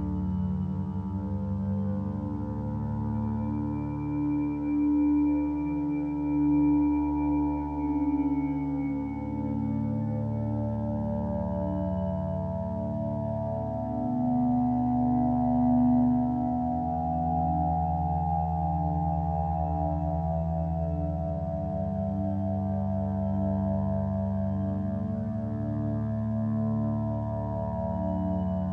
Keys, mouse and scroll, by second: 2.1 ctrl+space, 11.6 ctrl+alt+shift+e.